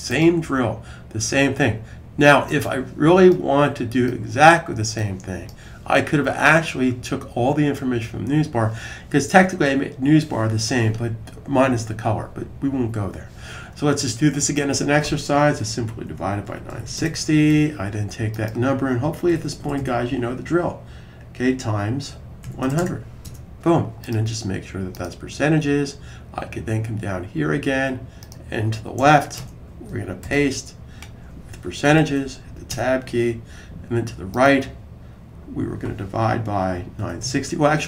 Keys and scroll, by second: 15.7-17.2 typing, 19.1 Right, 19.3 Right, 19.5 Right, 19.6 Right, 21.7-23.3 typing, 30.1 super+v, 36.1-37.8 typing.